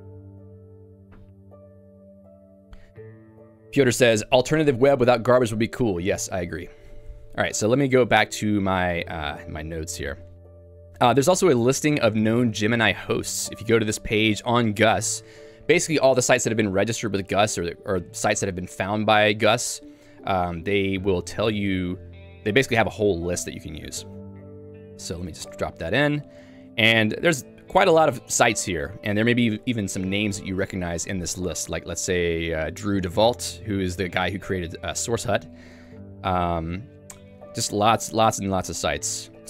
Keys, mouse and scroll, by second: 8.5 click, 9.2 q, 10.0 j, 12.5 v, 13.9 l, 15.2 y, 22.7 Return, 25.6 Return, 27.4 ctrl+d, 27.8-29.7 ctrl+d, 32.2 d, 32.9 e, 36.7 ctrl+d, 37.2-39.4 ctrl+d.